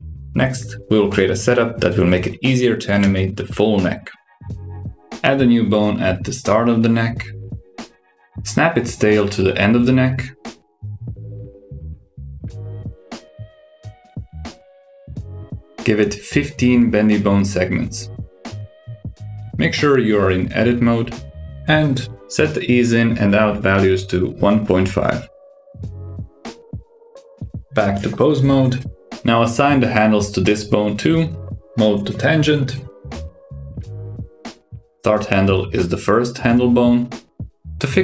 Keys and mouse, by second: 1.5 super+KP_6, 3.0 click, 4.4 shift+s, 6.8 shift+a, 7.4 click, 7.9 s, 9.4 click, 9.8 shift+s, 11.4 click, 12.0 shift+s, 13.5 click, 14.0 ctrl+alt+s, 17.0-19.2 drag, 21.7-26.4 drag, 28.3-29.1 drag, 31.0-32.0 drag, 32.5-34.3 drag, 35.2-38.0 drag.